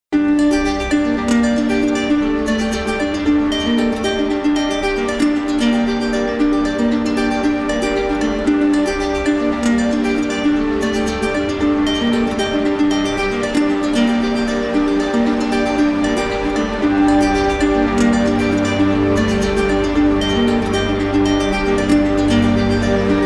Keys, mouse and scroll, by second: 1.4-2.4 drag, 2.6-3.7 drag, 4.3-5.3 drag, 5.9-6.9 drag, 9.6 click, 11.3 click, 12.5 alt+click, 16.3 click, 17.9 click, 18.4 click, 19.7-20.8 drag.